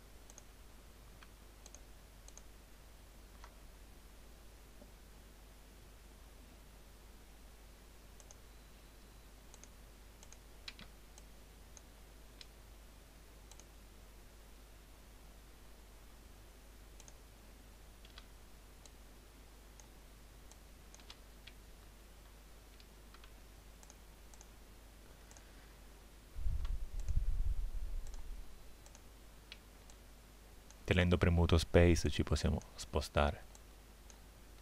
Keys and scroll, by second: 10.8 space, 18.2 space, 29.6 space.